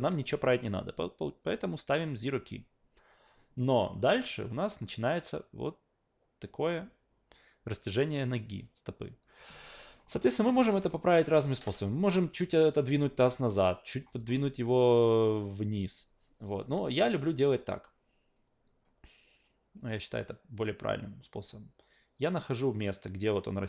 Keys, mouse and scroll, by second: 2.0 click, 4.2-9.3 drag, 10.0 alt+middle click, 10.5 w, 10.9 alt+middle click, 12.0 click, 13.0 ctrl+z, 13.6 click, 14.2 ctrl+z, 15.1 click, 15.8 ctrl+z, 18.8-23.6 drag.